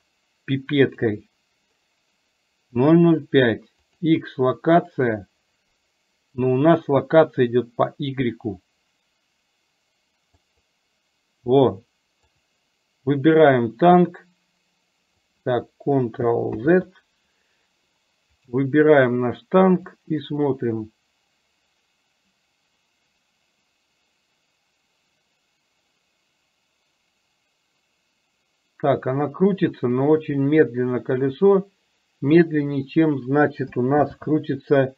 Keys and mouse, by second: 14.1-15.2 drag, 16.6 ctrl+z, 20.1-32.5 drag, 34.1 ctrl+z.